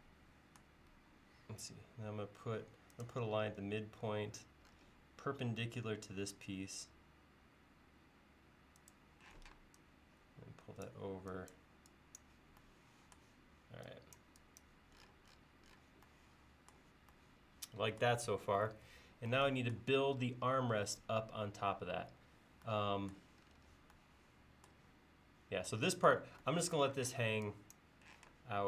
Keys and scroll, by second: 9.4 p, 11.1 e, 27.1 space, 28.2 m.